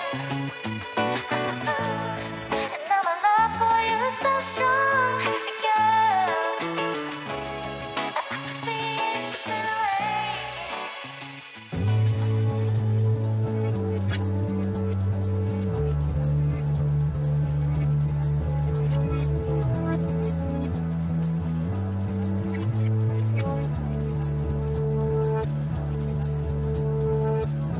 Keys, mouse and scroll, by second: 0.0-0.6 scroll up 1, 0.6-1.2 scroll up 1, 1.2-2.6 scroll up 1, 2.6-3.1 scroll down 2, 3.1-5.2 scroll down 1, 5.2-8.7 scroll up 4, 8.7 e, 18.1 e, 20.8 scroll down 2, 21.0-22.0 middle drag, 22.0 shift+z, 22.5-23.6 scroll up 1, 23.6 e.